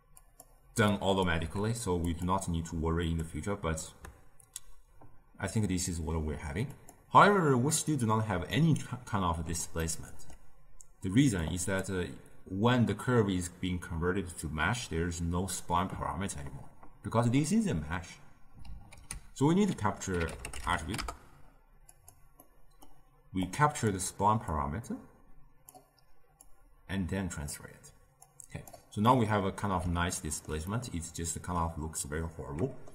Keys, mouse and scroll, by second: 0.1 click, 0.9-1.4 drag, 1.4 g, 3.0 click, 6.7 click, 8.5-11.4 middle drag, 11.4 click, 18.9 ctrl+a, 22.4-23.4 middle drag, 23.4 click, 24.4-26.4 drag, 28.2 click, 29.0-32.9 middle drag.